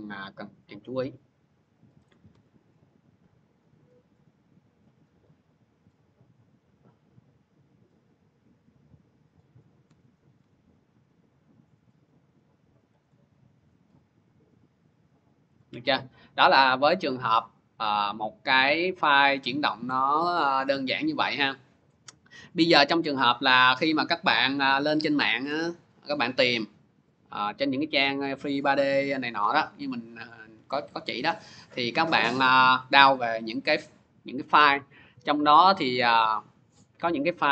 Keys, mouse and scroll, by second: 1.9 click, 2.1 c, 4.8 click, 9.1 click, 9.7 c, 10.2 c, 12.9 click, 15.4 click, 17.4 click, 18.4 click, 19.7 click, 20.6 click, 21.3 click, 27.3 click, 27.5 alt+Tab, 29.0 click, 31.2 click, 31.4 click, 32.1 click, 32.2 click, 34.0 click, 34.2 click, 35.6 click, 35.8 click.